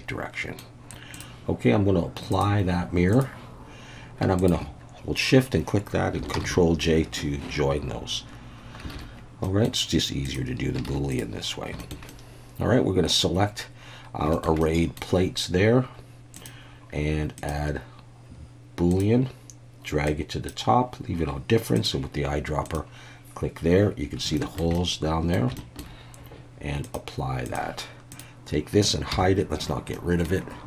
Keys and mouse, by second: 1.1 click, 2.5-3.2 drag, 6.3 ctrl+j, 8.9 alt+a, 9.4 middle click, 10.9 alt+a, 11.1 click, 11.8 shift+middle click, 12.1-13.2 middle drag, 14.3 shift+middle click, 14.6-15.0 middle drag, 16.4 click, 17.4-19.0 drag, 20.0-20.5 drag, 21.8 click, 24.3 shift+middle drag, 24.7-25.3 middle drag, 25.6 shift+middle drag, 26.8-27.6 drag, 28.1-29.1 drag, 29.1 h, 29.9-30.2 middle drag.